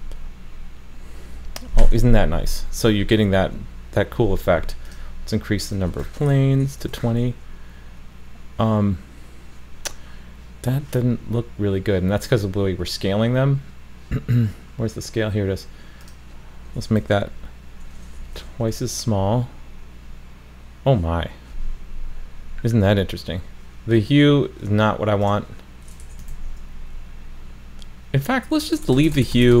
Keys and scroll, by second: 6.9 super+s, 18.7 super+s, 26.3 super+s.